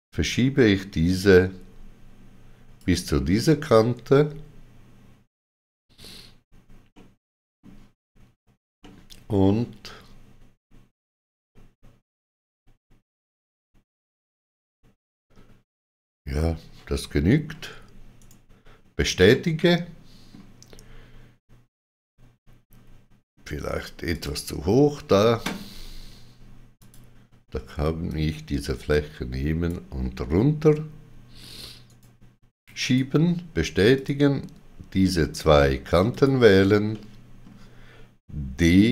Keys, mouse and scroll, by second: 6.9 middle click, 8.8 middle click, 18.1 right click, 19.3 middle click, 24.1 click, 26.7 click, 26.7 middle click, 28.0 click, 31.8 right click, 32.8 right click, 33.9 click, 35.2 shift+click, 36.0 shift+click, 36.9 middle click, 38.6 d.